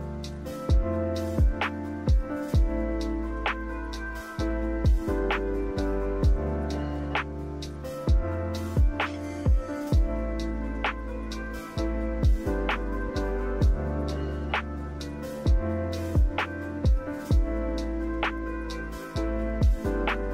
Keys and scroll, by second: 7.7 5, 7.8 Return.